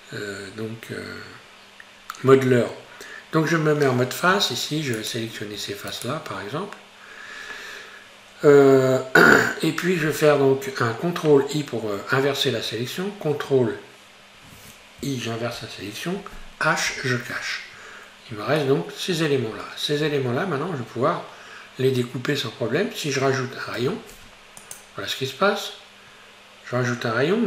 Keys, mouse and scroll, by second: 4.4 3, 5.0 right click, 5.9 shift+right click, 6.3-7.8 scroll down 3, 8.5 KP_Divide, 15.6 ctrl+i, 16.9 h, 18.6 shift+middle click, 19.5-23.1 scroll up 3, 23.8 ctrl+r.